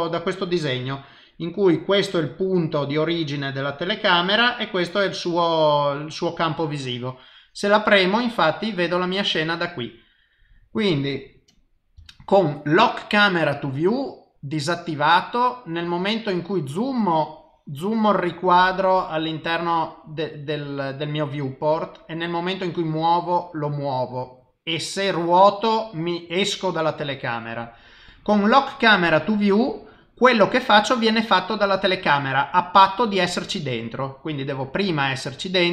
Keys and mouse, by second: 13.9 click, 13.9 n.